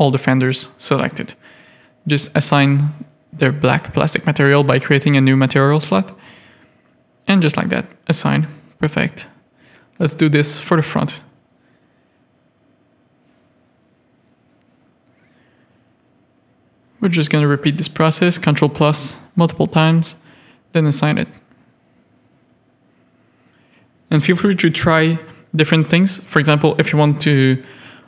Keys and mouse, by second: 0.1 shift+middle click, 0.4 middle click, 2.6 click, 3.4 click, 4.4 click, 8.0 Tab, 9.2 alt+a, 11.0 shift+click, 11.5 Tab, 12.0 3, 12.6 click, 15.9 ctrl+KP_Add, 16.6 ctrl+KP_Add, 17.0 click, 18.2 ctrl+KP_Add, 18.5 ctrl+KP_Add, 19.7 click, 20.2 Tab, 21.2 click, 21.7 middle click, 22.3 shift+click, 23.0 middle click, 23.5 Tab, 23.5 middle click, 24.3 KP_3, 25.0 click, 26.0 c.